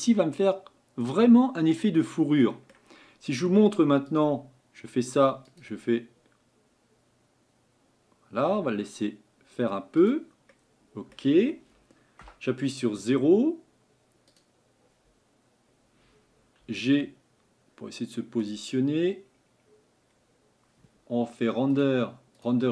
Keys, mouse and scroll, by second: 4.2-10.5 drag, 10.5-12.2 middle drag, 12.2 KP_0, 14.4 click, 16.6 g, 18.8-19.5 scroll up 4.